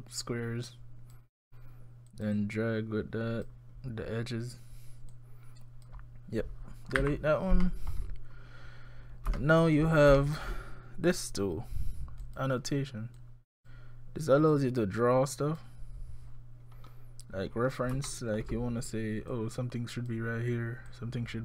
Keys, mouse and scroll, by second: 2.1 click, 2.4 click, 5.1 click, 7.0 Delete, 7.6 middle click, 9.3 scroll up 1, 9.4 shift+middle click, 9.8 scroll down 1, 10.2 shift+middle click, 12.2 click, 13.2 click, 14.5 click, 16.8-17.1 scroll up 1, 17.5-18.1 scroll up 4, 18.1 shift+middle click, 19.3 click, 20.9 click.